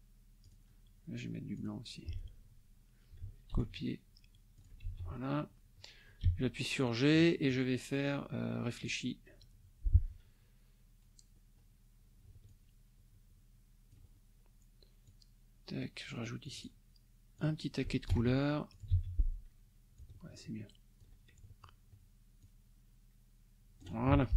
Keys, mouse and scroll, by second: 0.4 click, 1.6 click, 3.5 ctrl+c, 4.5 ctrl+click, 4.9 ctrl+v, 6.2 g, 7.5-9.0 drag, 12.5-14.1 ctrl+drag, 15.0 click, 16.4 click, 17.4 click, 18.1 ctrl+c, 18.7 ctrl+click, 18.9 ctrl+v, 19.9-21.2 ctrl+drag, 22.4-24.0 ctrl+drag, 24.1 ctrl+F1.